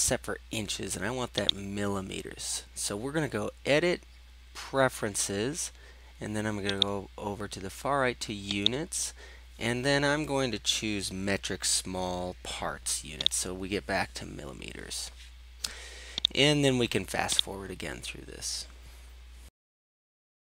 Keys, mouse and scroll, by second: 1.5 click, 6.9-8.1 drag, 8.8-17.6 drag, 19.6 click, 20.2 drag.